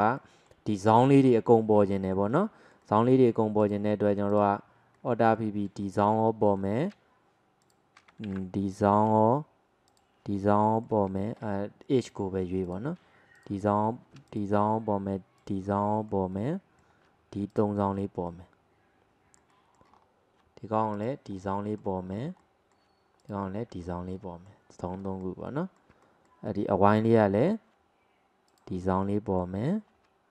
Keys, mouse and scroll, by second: 0.2-1.3 middle drag, 1.3-2.0 scroll up 2, 2.0-3.6 shift+middle drag, 3.6 click, 4.4 alt+click, 5.0-6.3 middle drag, 6.3 scroll up 1, 6.6-7.7 middle drag, 7.7 alt+shift+click, 8.3 ctrl+z, 8.4-10.0 middle drag, 10.0 alt+shift+click, 10.4-12.1 middle drag, 12.1 click, 12.7 click, 13.4 alt+shift+click, 14.4 alt+shift+click, 15.4 alt+shift+click, 15.8-17.6 middle drag, 17.6 alt+shift+click, 18.0 scroll down 1, 18.3-20.0 middle drag, 20.0-21.0 scroll up 1, 21.0 alt+shift+click, 21.4-22.2 middle drag, 22.2 scroll up 1, 22.4 middle click, 23.2 alt+shift+click, 23.8-24.2 scroll down 1, 24.2-28.6 middle drag, 28.6 alt+shift+click, 29.1-30.3 middle drag.